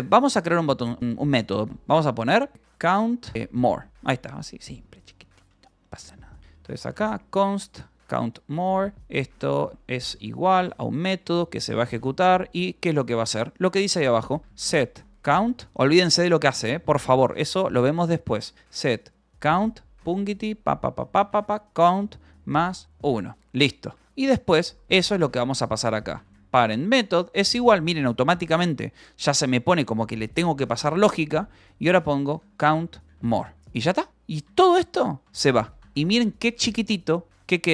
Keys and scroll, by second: 0.0-1.2 typing, 0.8 Escape, 2.3-11.8 typing, 5.4 Escape, 12.1 Return, 12.5 Escape, 12.9-21.8 typing, 22.8-26.4 typing, 23.1 Escape, 23.8 ctrl+s, 26.5 Return, 32.3-37.7 typing, 33.9 ctrl+s, 35.4 Escape.